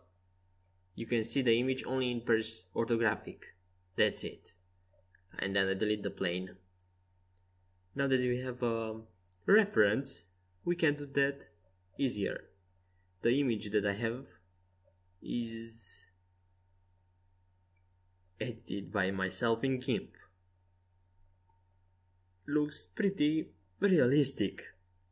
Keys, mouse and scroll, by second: 0.1-1.4 middle drag, 1.4 KP_5, 1.9 KP_1, 2.5 KP_3, 3.0 KP_5, 5.5 x, 8.1-9.9 right drag, 9.3-13.1 drag, 12.8 Tab, 15.1 w, 17.7 w, 21.4 s.